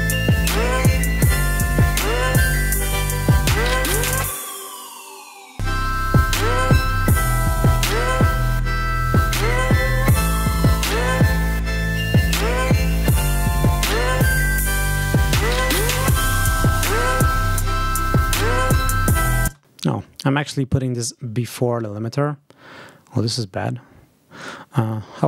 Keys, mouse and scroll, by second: 0.6 click, 1.9 click, 5.4 click, 6.8 click, 12.5 scroll up 2, 19.0 click, 19.3 space, 24.3 right click.